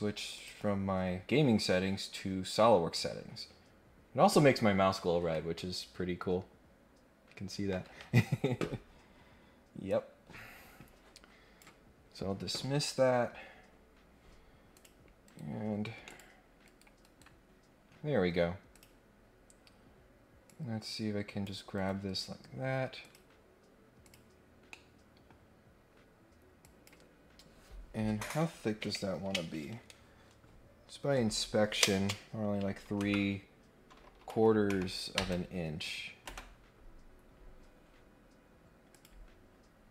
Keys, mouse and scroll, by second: 9.9-11.6 drag, 14.7 click, 15.2 Escape, 16.0 middle click, 16.0 click, 16.6 Escape, 18.7 click, 20.4 click, 21.7 Escape, 23.0 click, 24.0 click, 24.7 middle click, 25.4-25.9 scroll up 2, 26.6 click, 38.9 click.